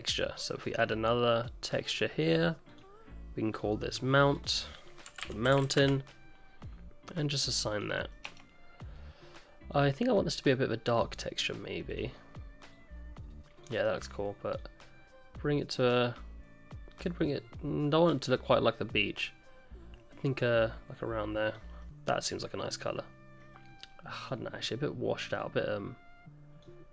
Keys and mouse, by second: 2.7 click, 3.6 click, 4.3-6.5 drag, 7.7 click, 8.1 middle click, 8.5 Tab, 11.9 click, 21.8-22.4 middle drag, 22.6-23.3 middle drag.